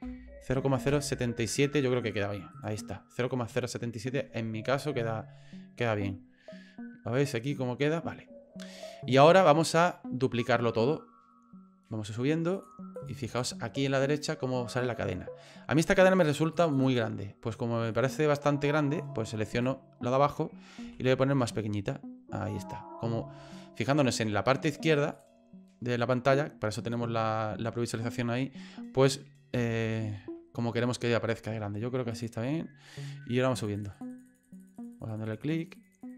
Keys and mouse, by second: 2.5 right click, 12.6 click, 13.3 click, 16.0 click, 16.3 click, 16.4 click, 16.6 click, 16.9-18.0 drag, 18.0 middle click, 19.5 right click, 20.8 s, 29.5 s, 33.6 click, 33.7 click, 33.9 click, 34.1 click, 34.3 click, 34.4 click, 34.6 click, 34.8 click, 34.9 click, 35.1 click, 35.2 click, 35.4 click, 35.6 click, 35.7 click, 35.9 click, 36.1 click.